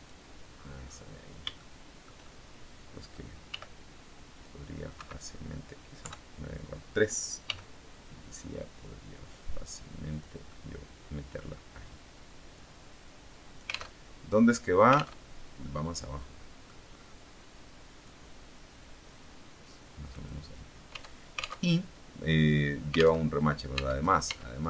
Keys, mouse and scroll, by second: 0.5-1.2 scroll down 2, 1.5 shift+middle click, 3.4 g, 4.8 Escape, 5.9 KP_3, 7.4 g, 10.0 click, 10.4-11.4 middle drag, 12.7-13.8 drag, 13.8 alt+Tab, 15.2 alt+Tab, 15.5-16.7 drag, 16.7-17.2 scroll up 2, 17.9-20.2 drag, 20.8 Tab, 23.1 alt+Tab, 23.6 Tab, 24.5 right click.